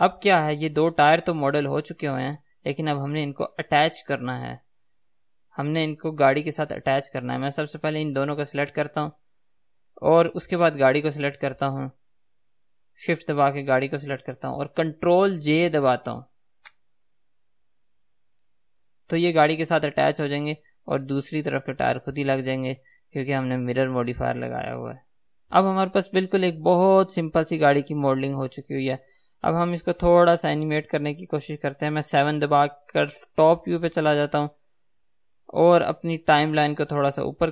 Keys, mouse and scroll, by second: 0.0-8.7 middle drag, 3.2-4.0 scroll down 2, 4.0-5.2 scroll down 1, 8.7 shift+click, 18.0 ctrl+j, 19.5 scroll down 1, 20.0-25.6 middle drag, 21.8-25.3 scroll up 2, 25.3 scroll up 1, 25.6 ctrl+z, 25.6-37.2 right drag, 33.3 KP_7, 37.2 click.